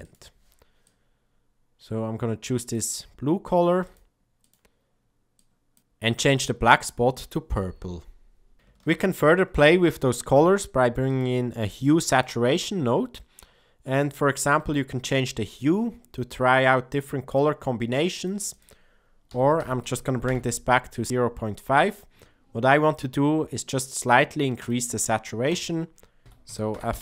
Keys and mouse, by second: 3.7 click, 4.3 click, 8.5 shift+a, 8.8 shift+a, 13.2 middle click, 14.9-18.2 shift+drag, 18.6-21.1 drag, 26.2-27.0 drag.